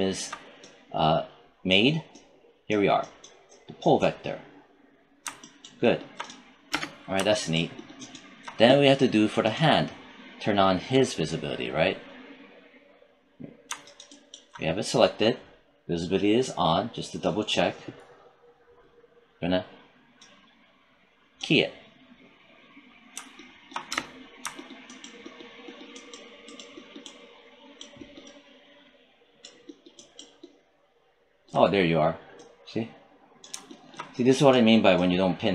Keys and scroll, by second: 23.8 space.